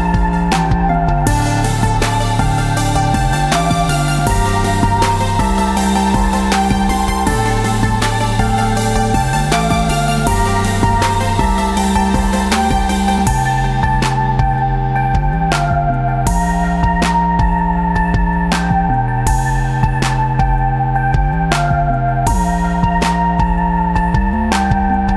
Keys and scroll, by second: 4.9 v, 6.3 ctrl+g, 10.1 shift+Tab, 10.4 space.